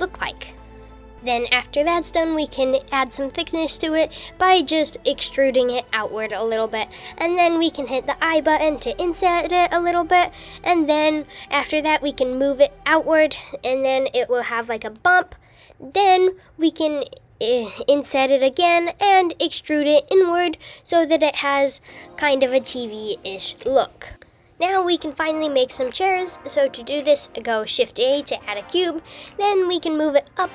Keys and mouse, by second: 0.7 g, 1.1 shift+click, 1.4 s, 3.0 Tab, 4.5 e, 9.1 i, 11.4 super+z, 14.8 g, 18.6 e, 21.2 Tab, 24.2 shift+a, 27.7 KP_7.